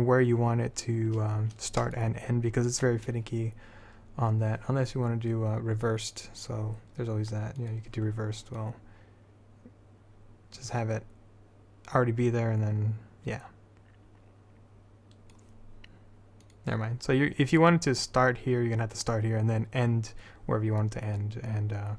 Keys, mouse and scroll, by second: 2.7-4.9 drag, 4.9-7.8 middle drag, 7.8 click, 9.3-10.6 drag, 14.6-15.9 middle drag, 16.6-20.6 drag, 21.3-21.9 drag.